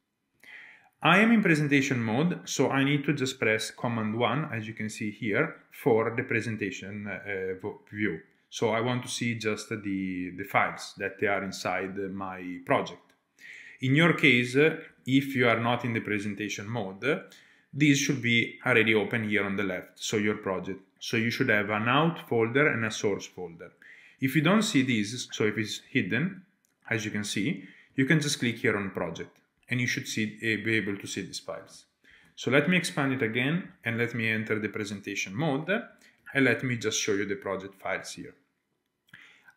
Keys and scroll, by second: 5.4 super+1, 15.1 shift+super+a, 16.5 Return, 24.8 super+1, 26.0 super+1, 32.1 shift+super+a, 33.6 Return, 36.2 super+1.